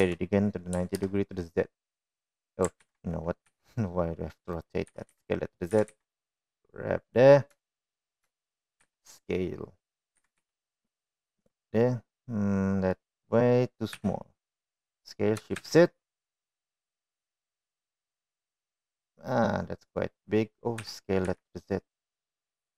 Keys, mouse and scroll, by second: 0.4 r, 4.2 ctrl+z, 4.2 s, 5.6 s, 6.4 g, 8.3 shift+middle click, 9.0 shift+middle click, 9.5 s, 10.9 g, 12.5-13.6 middle drag, 14.7 s, 19.5-21.0 middle drag, 21.6 s.